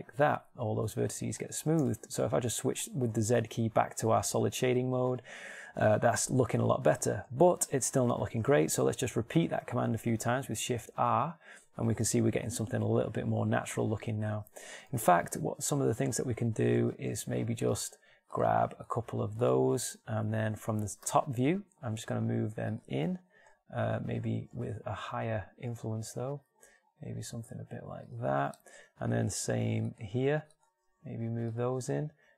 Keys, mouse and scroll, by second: 2.1 z, 5.9-8.3 middle drag, 9.9 shift+r, 10.7 shift+r, 11.1 shift+r, 11.6 shift+r, 17.3 ctrl+Tab, 21.4 KP_7, 22.6 g, 24.9 ctrl+z, 26.1 g, 28.9 middle click, 31.4 g.